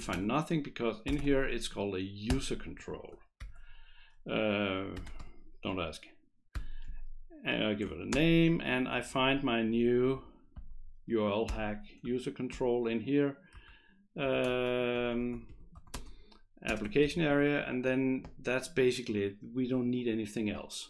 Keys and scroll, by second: 0.1 ctrl+BackSpace, 0.9-1.7 typing, 2.3 Return, 3.4 shift+9, 4.8-5.7 typing, 6.8 ', 8.1 ctrl+space, 9.1 Down, 9.5 Down, 9.7 Down, 11.5 Return, 12.5 ctrl+j, 13.5 Right, 14.2 Return, 14.5-17.8 typing, 14.9 Return.